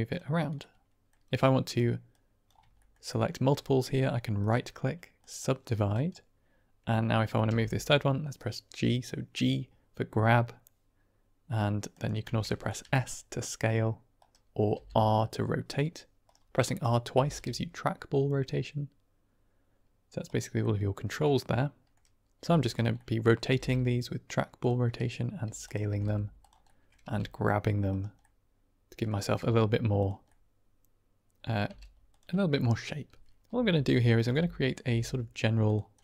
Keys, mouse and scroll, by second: 0.0 click, 0.5 middle click, 1.3 click, 2.0 click, 2.7 shift+middle click, 3.0 click, 5.8 click, 7.5 g, 11.8 click, 12.7 s, 14.1 click, 14.6 r, 16.1 click, 16.5 middle click, 17.0 r, 17.2 r, 20.1 right click, 20.5-21.8 middle drag, 22.3 s, 22.6 click, 22.9 click, 23.4 r, 23.5 r, 24.5 click, 24.8 middle click, 25.3 s, 25.5 click, 25.8 r, 25.9 r, 26.3 click, 26.6 middle click, 26.9 g, 27.8 right click, 28.2 middle click, 29.4 r, 29.9 click, 30.2-31.4 middle drag, 31.6 g, 32.0 click, 33.4-34.7 typing, 35.5 click, 35.9-36.0 middle drag.